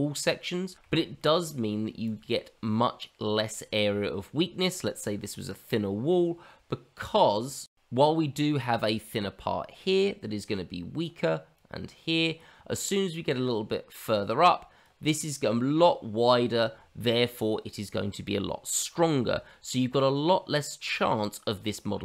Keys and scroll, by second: 6.1 shift+z, 21.5 ctrl+z, 21.8 ctrl+z, 21.9 ctrl+z.